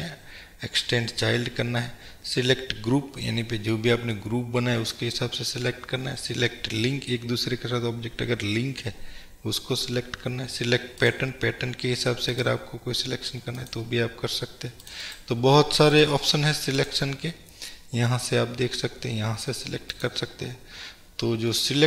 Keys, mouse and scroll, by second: 15.2-16.0 right drag, 16.0 drag, 16.9-20.1 drag, 20.7 scroll up 1, 21.5-21.8 middle drag.